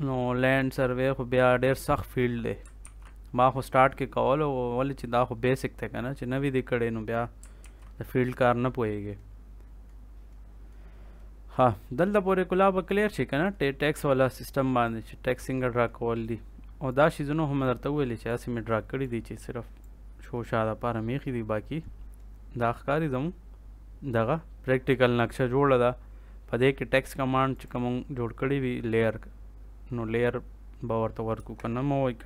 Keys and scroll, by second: 2.7 ctrl+s, 7.5 ctrl+s, 31.3 Escape.